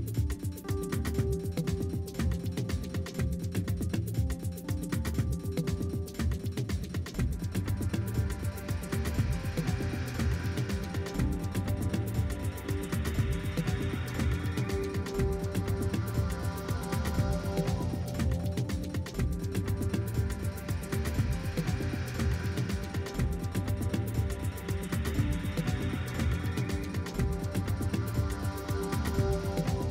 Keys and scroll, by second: 0.0-1.0 typing, 1.2 Return, 1.5 Right, 1.9 shift+Left, 2.5 Up, 3.0-5.3 typing, 5.4 shift+Left, 5.6 Right, 6.1 Right, 6.4-8.0 typing, 8.0 super+a, 8.8 Right, 9.3 Left, 9.3 Up, 9.7 Right, 10.1-16.2 typing, 13.4 Return, 16.4 super+a, 16.9 Right, 17.0 super+a, 17.2 Down, 17.3 super+a, 17.7 Down, 18.4-21.0 typing, 21.4 Left, 21.8 Right, 22.7-24.2 typing, 24.3 Return, 25.5 Down, 25.8 Left, 26.2-27.8 typing, 28.2 Right, 28.2 Down, 28.5 Left, 29.0-29.9 typing.